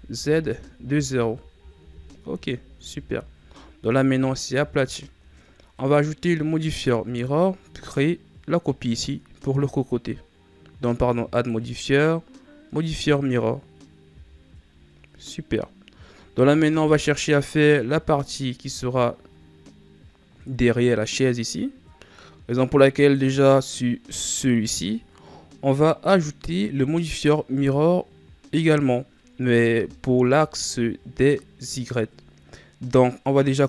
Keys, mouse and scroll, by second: 2.2 z, 2.7 Tab, 3.5-4.6 scroll down 3, 4.6-5.7 scroll up 4, 5.7 scroll up 1, 5.7 right click, 7.8-10.9 drag, 11.2-14.0 drag, 14.0 a, 14.7-16.3 scroll down 2, 16.3 scroll down 1, 16.6 KP_3, 18.2 scroll up 2, 19.2-21.7 scroll up 2, 22.9 right click, 29.9 scroll up 2.